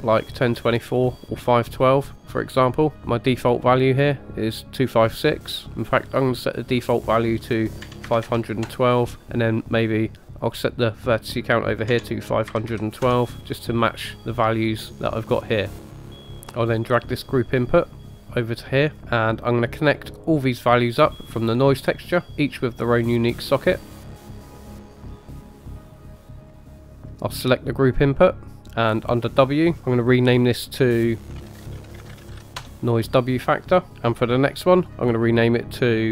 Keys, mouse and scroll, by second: 6.0-8.7 drag, 10.4-13.3 drag, 16.7 click, 19.0 typing, 19.1 click, 20.0 typing, 22.8-23.1 drag, 24.4 drag, 25.1-25.4 drag, 25.6-26.0 drag, 26.2-26.5 drag, 26.7 drag, 27.2 click, 28.9 click, 29.1-32.7 drag, 34.8 click, 35.4-36.1 drag.